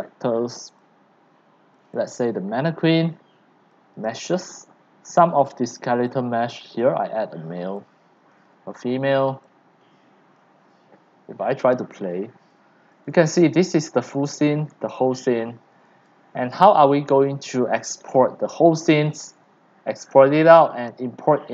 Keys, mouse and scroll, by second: 0.0 drag, 0.3 click, 0.7 click, 0.9 click, 1.9 click, 2.7 click, 4.0 click, 4.2 click, 6.2 click, 7.7 click, 9.4 click, 10.4 click, 10.9 click, 11.2-11.8 drag, 12.2-13.2 drag, 12.9-16.4 typing, 16.5 Escape, 16.7 click, 18.1-19.3 s, 19.3 d, 19.5-20.2 w, 20.6 scroll down 5, 20.9-21.5 drag.